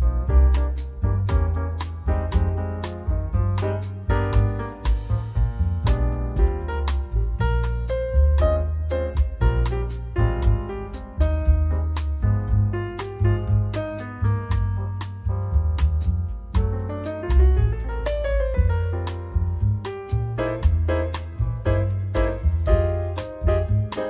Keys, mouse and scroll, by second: 1.9 click, 3.0 click, 3.5-3.9 scroll down 1, 4.6 click, 5.1 0, 6.0 scroll down 1, 6.8 scroll up 1, 9.7 click, 10.8 click, 11.9 1, 13.5 click, 14.0 0, 15.4 click, 16.6 click, 17.1 click, 19.4 click, 20.3 click, 21.2 scroll down 1, 21.7 scroll up 1, 23.2 click.